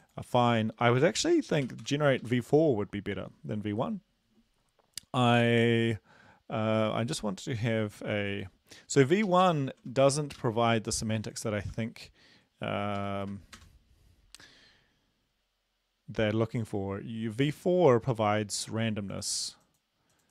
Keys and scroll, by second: 1.7 4, 1.8 Delete, 2.2 Right, 9.2 ctrl+shift+Left, 9.4 ctrl+shift+Left, 10.3 ctrl+c, 11.7 ctrl+v, 13.0 Down, 13.3 space, 13.5 Return.